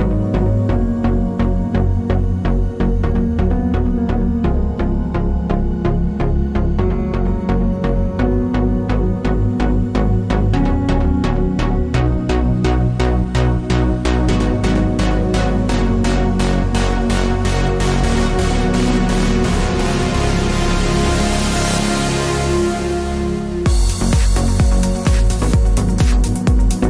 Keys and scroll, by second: 1.4-2.3 typing, 3.9 super+c, 4.0 super+v, 12.4 d, 18.9 d.